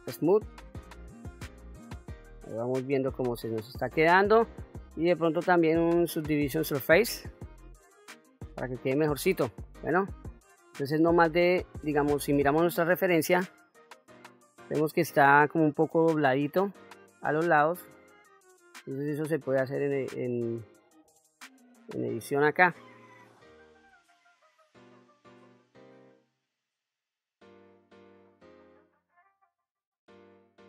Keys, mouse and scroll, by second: 1.5-3.3 middle drag, 4.6-7.5 drag, 8.0-8.8 middle drag, 9.7 middle click, 20.3 click, 21.1 Tab, 21.8 middle click, 22.7-23.7 scroll down 1, 24.2 KP_1, 24.5 scroll up 2, 24.9 q, 25.2 click, 25.9 g, 27.3 click, 27.7 ctrl+r, 28.5 click, 29.0 ctrl+r, 29.2 click, 29.9 alt+shift+click, 30.4 g.